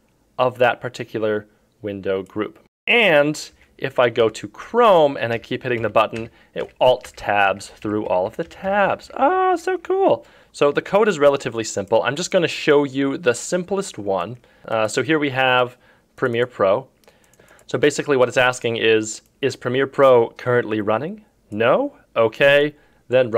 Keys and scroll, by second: 1.1 F4, 3.5 F3, 4.2 F2.